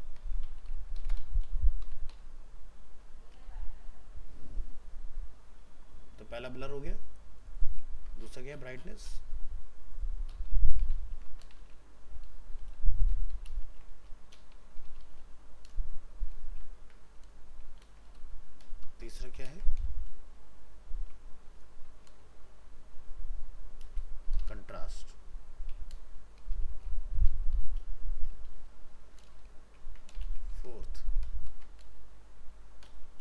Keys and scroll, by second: 8.0 ctrl+c, 11.1 ctrl+c, 11.6 ctrl+v, 12.8 ctrl+shift+Left, 13.6 ctrl+space, 16.7 ctrl+c, 17.8 ctrl+v, 18.9 ctrl+shift+Left, 19.5 ctrl+space, 29.9 ctrl+c, 30.2 ctrl+Return, 30.3 ctrl+v, 31.5 ctrl+shift+Left.